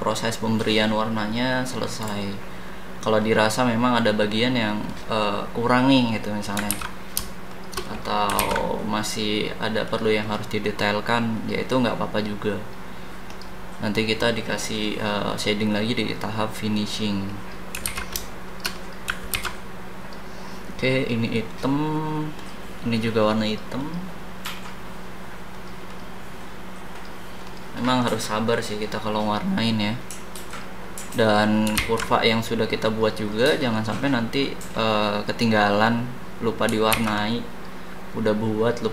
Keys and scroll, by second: 6.7 ctrl+z, 8.4 ctrl+z, 17.8 ctrl+z, 19.3 ctrl+z, 31.7 ctrl+z, 36.9 ctrl+z.